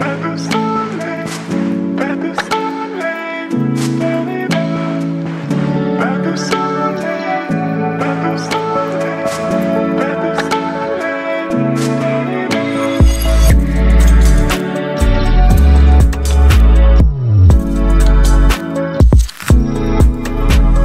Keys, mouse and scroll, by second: 4.1 ctrl+t, 5.5 click, 8.0 ctrl+t, 9.7-15.6 drag, 15.6 right click, 16.7 click, 19.6 click.